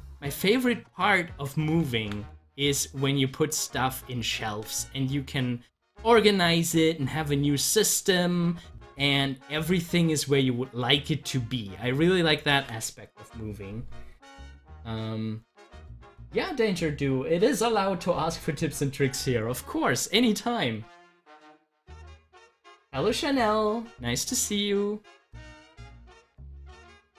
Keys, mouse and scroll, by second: 0.9 click, 4.5 z, 5.3 click, 5.6-9.8 drag, 10.9-12.5 drag, 12.5 ctrl+z, 26.2 scroll down 1, 26.7 middle click.